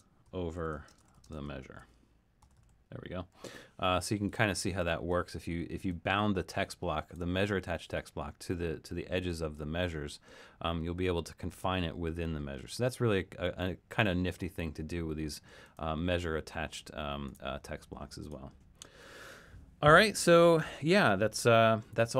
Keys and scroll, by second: 0.0-3.3 typing, 20.8 super+-, 21.5 super+-.